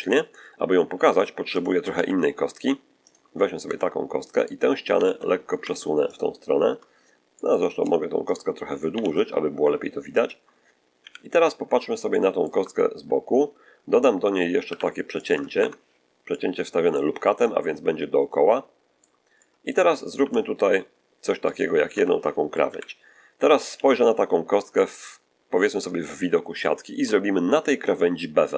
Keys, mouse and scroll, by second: 0.9 Tab, 1.2 x, 1.4 click, 1.8 shift+a, 2.9 click, 3.5 Tab, 4.2 right click, 4.8 g, 5.0 x, 6.0 ctrl+click, 7.2 middle click, 8.2 shift+right click, 8.8 shift+g, 9.0 x, 10.0 ctrl+click, 10.9 ctrl+1, 12.0 shift+middle click, 14.5 ctrl+r, 15.1 ctrl+click, 15.4 ctrl+Escape, 16.2 ctrl+middle click, 17.3-19.1 middle drag, 19.2 middle click, 20.0 ctrl+r, 21.4 click, 21.8 Escape, 22.6 1, 23.6 z, 25.2-25.5 scroll up 2, 25.9 shift+middle click.